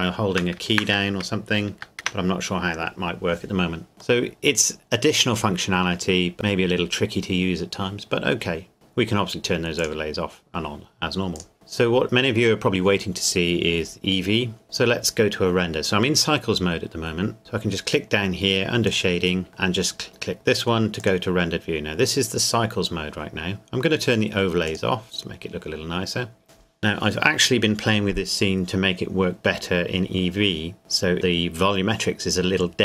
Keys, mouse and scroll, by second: 4.2 middle click, 6.3 scroll down 1, 7.2-8.7 scroll up 1, 8.7 click, 11.5 KP_0, 18.9 click, 21.0 click, 24.9 click, 25.4 click.